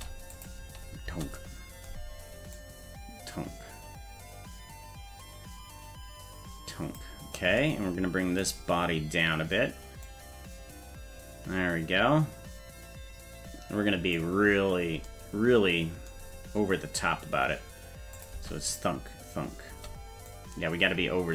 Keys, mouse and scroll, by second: 0.3 click, 0.6 space, 1.1 space, 2.5-7.0 drag, 10.0-14.2 drag, 18.1 click, 18.3 space, 19.7 space, 20.3-21.3 drag.